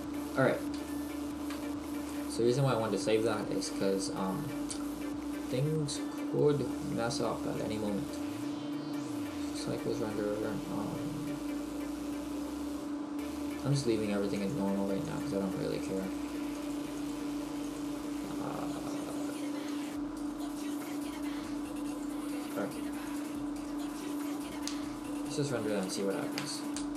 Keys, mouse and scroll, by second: 1.0 shift+middle click, 1.5-2.1 scroll down 1, 2.1 middle click, 2.1-2.5 scroll down 1, 22.2 click.